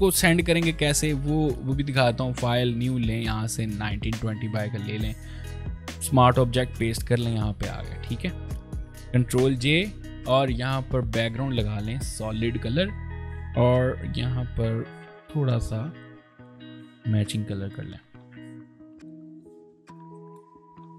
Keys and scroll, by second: 4.7 ctrl+v, 9.3 ctrl+j.